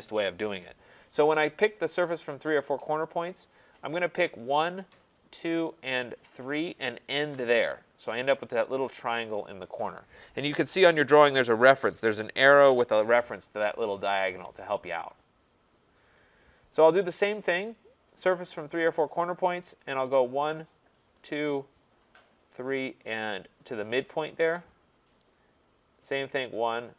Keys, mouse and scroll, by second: 2.5 click, 4.2 click, 5.2 click, 6.4 click, 7.2 Return, 15.3-18.5 scroll, 18.5 click, 19.0 scroll, 20.3 click, 21.1 click, 22.5 click, 24.1 click, 25.2 right click, 26.4 click.